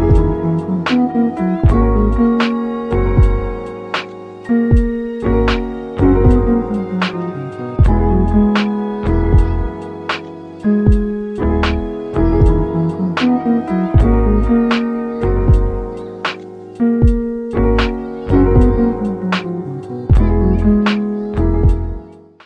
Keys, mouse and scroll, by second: 1.0 click, 3.2 click, 3.5 click, 4.0 click, 4.2 click, 4.4 middle click, 4.4 scroll up 1, 4.7 click, 5.5 click, 5.9 click, 6.2 click, 6.6 click, 6.9 click, 7.3 click, 7.6 click, 8.0 click, 8.4 click, 8.8 click, 9.0 middle click, 9.1 scroll up 1, 9.4 click, 9.7 click, 10.0 click, 10.4 click, 10.6 middle click, 11.0 scroll down 2, 11.1 middle click, 11.4 click, 12.6 scroll down 4, 12.9 click, 14.0 scroll down 2, 14.5 click, 14.9 click, 17.2 middle click, 17.3 scroll up 1, 17.4 shift+middle click, 17.9 scroll down 2, 18.0 middle click, 18.1 click, 18.4-21.0 typing, 18.7 middle click, 19.2 middle click, 19.7 middle click, 20.7 middle click.